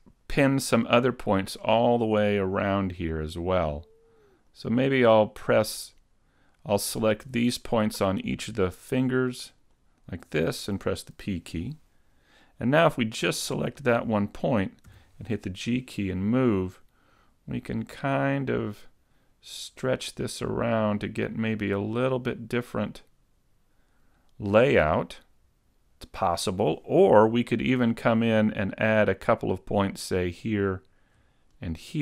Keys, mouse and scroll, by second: 1.6 right click, 1.6-3.2 scroll down 3, 3.2 shift+right click, 4.5 shift+right click, 5.8 shift+right click, 7.3 shift+right click, 9.6 shift+right click, 11.2 p, 13.3 right click, 14.9 g, 30.2 shift+middle click, 30.2 right click, 30.2 scroll up 4, 31.6 shift+right click.